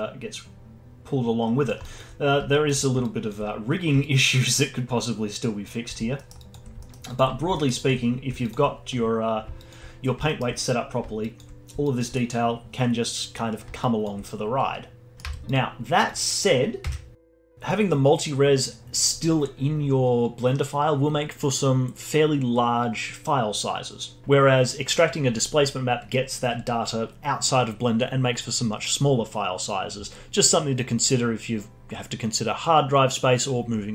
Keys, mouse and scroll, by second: 2.1-2.5 scroll up 3, 2.5-3.0 alt+middle drag, 3.0-6.1 alt+drag, 6.1 alt+middle drag, 6.4-6.8 alt+drag, 6.8-7.1 alt+middle drag, 7.1 alt+click, 7.3 scroll down 1, 7.5 alt+middle drag, 7.7-10.3 alt+drag, 10.3-10.8 alt+middle drag, 10.8-11.2 scroll down 1, 11.2-15.1 alt+drag, 15.1 middle click, 15.2 z, 16.1 click, 16.8 Tab, 18.1 a, 18.6 alt+r, 19.0 Tab, 19.5 click, 19.8 alt+middle click.